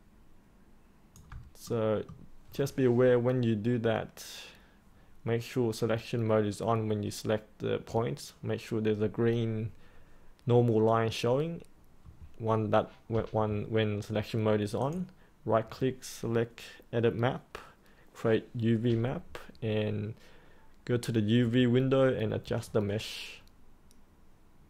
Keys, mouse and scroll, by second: 1.6 middle click, 14.7 click, 22.6-24.6 alt+drag.